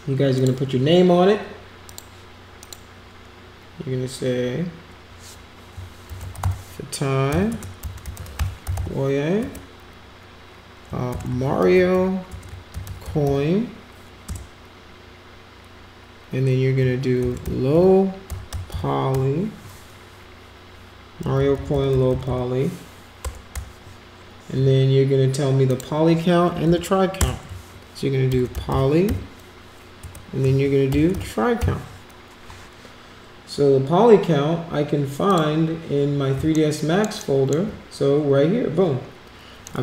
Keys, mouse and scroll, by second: 0.3 click, 1.9 click, 2.6 click, 6.1 shift+f, 7.5-9.1 typing, 9.4 Return, 10.8-12.2 typing, 13.3 n, 17.1 shift+l, 17.4 o, 21.9 Left, 22.1 Left, 22.2 Left, 23.2 BackSpace, 23.5 -, 25.7 click, 26.7 Right, 28.0-29.6 typing, 30.0 Return, 31.6 i, 35.3 click, 36.5 alt+middle click, 37.2 alt+middle click, 39.7 middle click.